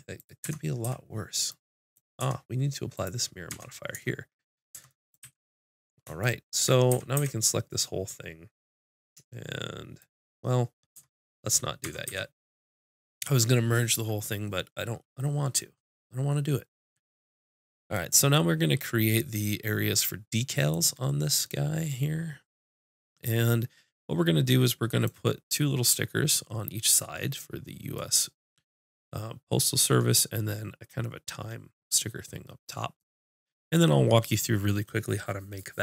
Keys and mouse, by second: 0.2 click, 0.5 Tab, 0.8 click, 0.9 z, 2.2 Tab, 3.0 click, 3.2 click, 3.5 Tab, 4.7 Tab, 5.2 z, 6.9 a, 7.2 a, 10.9 Tab, 11.8 Tab, 12.1 a.